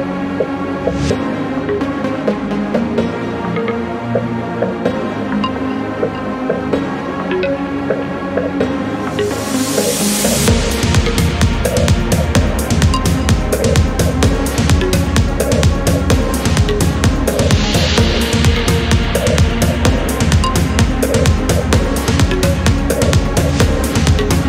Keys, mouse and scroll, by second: 1.0-1.4 scroll up 1, 1.4-1.7 scroll down 1, 2.0-2.4 scroll up 1, 2.6-2.9 scroll up 2, 3.4-3.8 scroll down 2, 5.6 click, 7.2-7.9 scroll down 4, 8.8-9.2 scroll up 2, 9.2 scroll down 1, 9.5-10.0 scroll up 1, 10.0 scroll up 1, 10.6 scroll down 1, 10.8 scroll up 1, 10.9-12.3 drag, 19.6 click, 21.4 click, 23.4 click, 24.2 click.